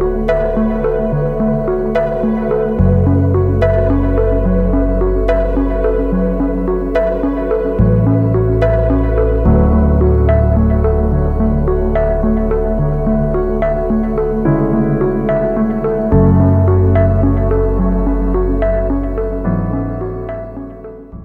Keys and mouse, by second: 0.2 Tab, 0.8-1.5 drag, 1.9 drag, 2.7 shift+drag, 3.2 Tab, 4.6 a, 5.0 a, 5.3 q, 6.3 a, 6.5 shift+drag, 7.7-9.9 drag, 9.9 Tab, 10.7-11.9 drag, 12.0 shift+drag, 12.6-13.5 drag, 14.3 ctrl+s, 14.4-19.7 drag.